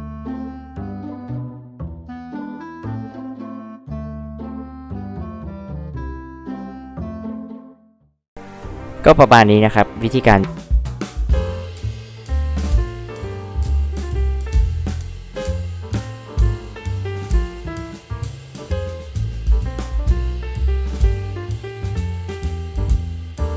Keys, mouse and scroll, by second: 0.0 click, 0.1 click, 0.9 click, 0.9 click, 1.4 ctrl+z, 2.1 click, 2.9 e, 2.9 click, 3.6 click, 5.2 p, 5.7 click, 5.8 click, 6.6 e, 6.7 click, 6.9 click, 7.2 click, 8.1 h, 8.2-8.6 drag, 9.4-9.8 drag.